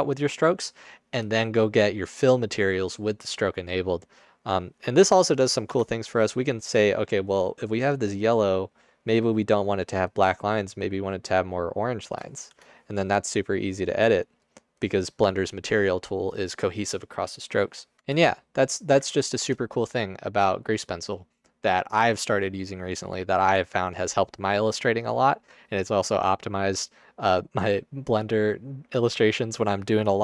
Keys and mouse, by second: 5.8 Tab, 12.5 Tab, 18.0 ctrl+Tab.